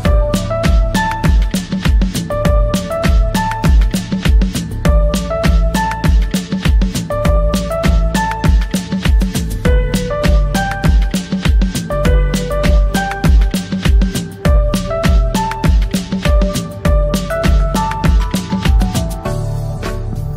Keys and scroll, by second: 9.6 ctrl+r, 12.9 F3, 14.6 ctrl+g, 17.9 c, 18.6 Escape, 18.9 F2.